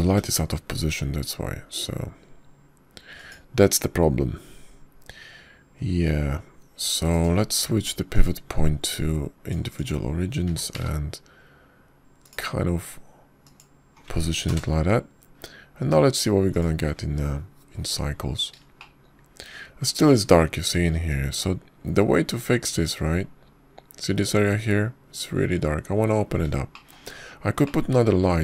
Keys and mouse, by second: 2.0 g, 7.6 r, 10.0-11.7 drag, 12.3 r, 16.4 ctrl+KP_0, 20.7-21.2 shift+middle drag, 21.3 shift+middle drag, 24.3-24.7 middle drag.